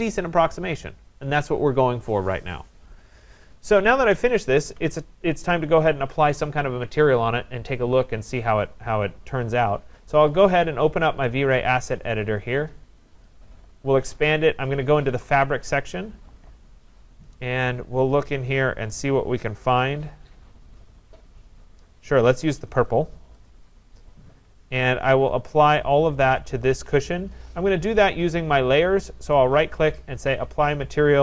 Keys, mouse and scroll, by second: 3.8 middle click, 3.9 middle click, 4.0 middle click, 4.4 middle click, 4.4 middle click, 4.6 middle click, 9.2 middle click, 11.2 click, 13.2 click, 15.0 click, 16.6-16.9 scroll down 4, 17.4-18.2 scroll down 4, 18.5-19.3 scroll down 1, 19.3-19.6 scroll down 1, 19.6 middle click, 20.6 middle click, 23.4 click, 25.9 click, 29.3 right click.